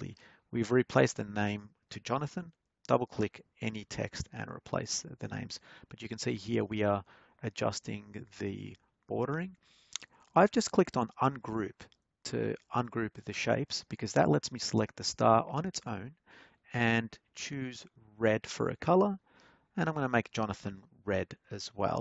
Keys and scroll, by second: 0.0-1.2 typing.